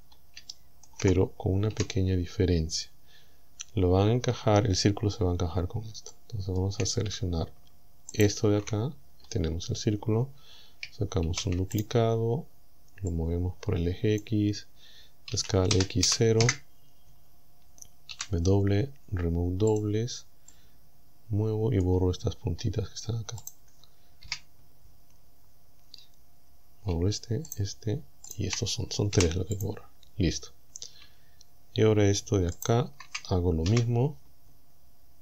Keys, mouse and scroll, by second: 0.0-0.3 scroll down 2, 0.5 shift+middle click, 0.9 shift+scroll up 2, 1.8 KP_7, 3.5-3.9 scroll up 2, 4.1-4.4 scroll up 2, 6.1 shift+middle click, 8.2 alt+shift+right click, 9.0-9.9 scroll down 4, 11.3 shift+d, 11.8 shift+right click, 13.2-14.4 drag, 15.4 s, 15.8 x, 16.1 KP_0, 16.4 KP_Enter, 18.2 w, 19.8 click, 20.5-21.9 middle drag, 21.9 scroll down 1, 22.4-23.1 scroll up 4, 23.4 right click, 24.3 KP_Decimal, 25.2-25.5 scroll up 1, 27.5 shift+right click, 28.3 shift+right click, 29.2 Delete, 29.6 click, 30.1-30.8 scroll down 2, 32.6 alt+shift+right click, 33.7 KP_1.